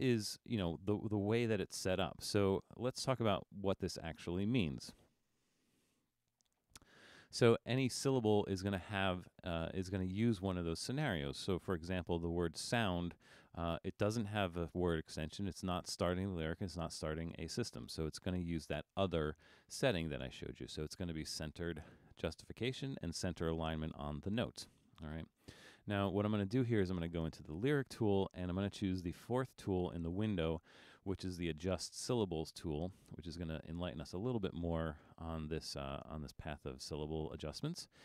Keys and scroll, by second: 5.9 super+=, 6.5 super+=.